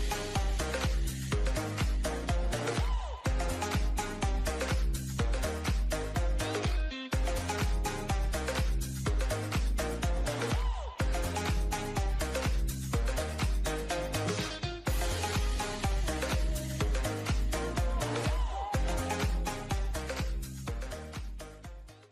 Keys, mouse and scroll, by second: 1.1 click, 1.7-2.6 scroll up 2, 2.6 click, 2.9-4.5 shift+middle drag, 4.5 shift+click, 5.7-8.8 drag, 9.3 shift+middle click, 10.1-11.7 drag, 12.4-13.9 shift+middle drag, 13.9-16.1 drag, 17.6 Tab, 17.9-18.3 scroll down 2, 18.4-21.5 middle drag.